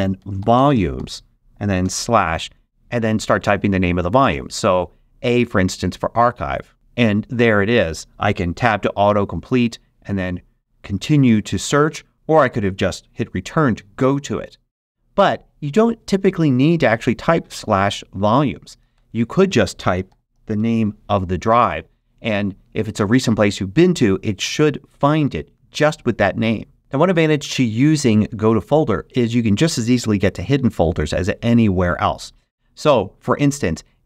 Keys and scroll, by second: 0.0-1.4 typing, 4.1 shift+a, 9.0 Tab, 18.7 super+a, 18.9 super+BackSpace, 19.7-21.0 typing.